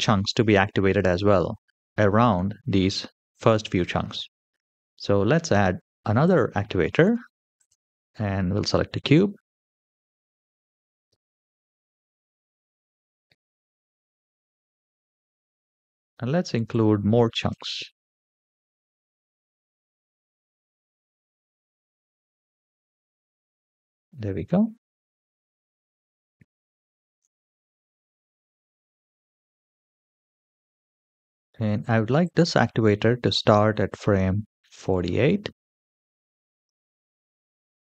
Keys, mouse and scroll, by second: 6.0-8.5 drag, 9.4 KP_7, 10.9 g, 13.3 s, 17.3 g, 19.1 g, 25.0 shift+middle click, 25.8-26.4 middle drag, 26.7 shift+middle drag, 27.6 KP_1, 28.3 KP_3, 28.6 shift+middle click, 28.7 g, 33.7-36.6 drag.